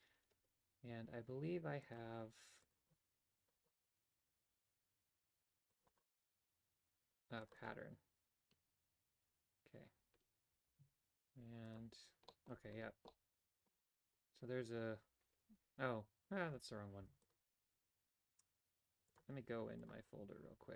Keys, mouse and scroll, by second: 10.6 z, 12.2 middle click, 13.0 middle click, 15.0 KP_7, 16.9 x.